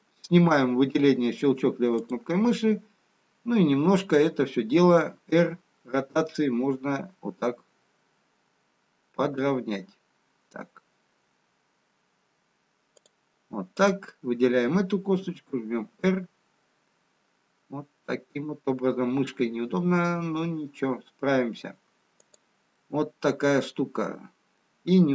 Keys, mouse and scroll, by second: 1.2 click, 1.9 click, 5.2 r, 14.3 click, 15.2 r, 22.9 middle click.